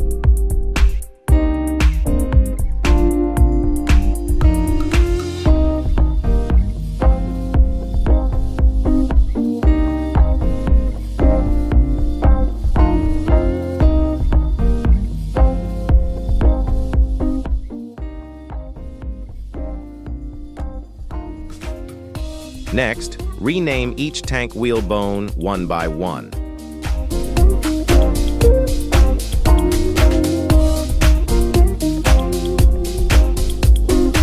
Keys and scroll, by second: 0.5 shift+s, 1.1 z, 1.7 Tab, 2.4 shift+s, 2.8 Tab, 3.9 shift+d, 4.3 shift+s, 5.0 Tab, 5.6 shift+s, 5.9 Tab, 7.0 shift+s, 11.5 z, 11.9 KP_3, 15.5 z, 18.2 z, 20.4 /, 22.9 ., 25.0 F2, 27.4-28.6 typing, 28.7 Return, 30.2 F2, 31.0-34.0 typing, 31.6 Left.